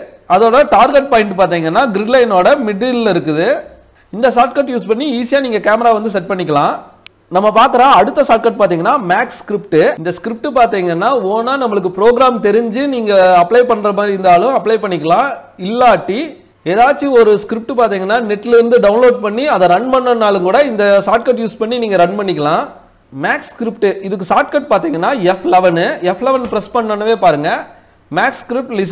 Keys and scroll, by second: 24.4 F11.